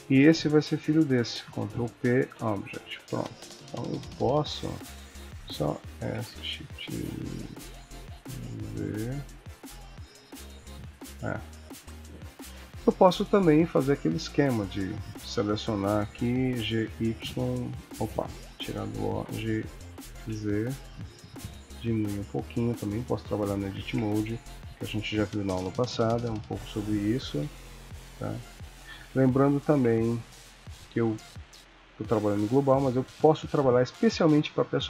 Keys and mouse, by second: 0.9 shift+click, 1.7 ctrl+p, 3.5 click, 3.9 r, 5.2 click, 5.9 s, 12.8 Tab, 13.9 click, 14.7 click, 15.6 click, 16.6 g, 18.6 o, 19.2 g, 23.8 Tab, 24.3 click, 25.5 g, 29.0 Tab, 29.7 Tab, 30.3 click, 31.3 click, 32.4 click, 34.5 click.